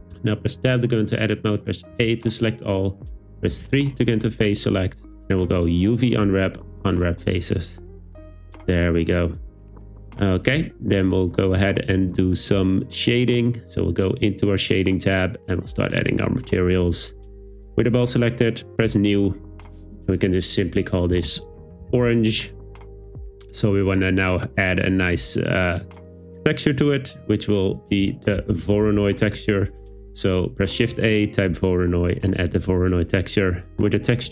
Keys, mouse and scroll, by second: 0.1 Tab, 1.9 a, 3.5 3, 4.5-7.0 drag, 7.9 Tab, 14.9 click, 18.9 drag, 20.1-22.1 drag, 23.2 click, 27.6 click, 27.9 shift+a.